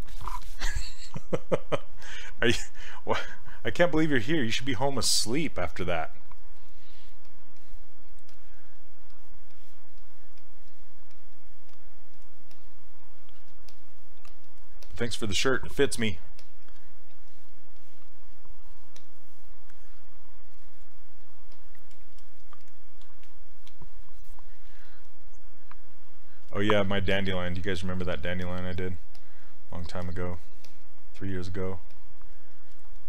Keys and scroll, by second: 5.8 s.